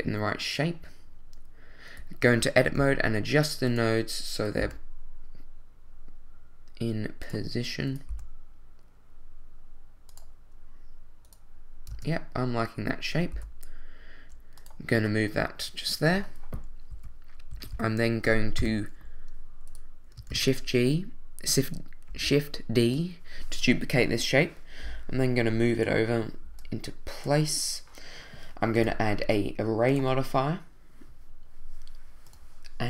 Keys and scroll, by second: 2.8 g, 4.6 g, 8.1 g, 11.9 Tab, 13.3 g, 16.9 1, 17.7 2, 18.6 1, 20.3 shift+d.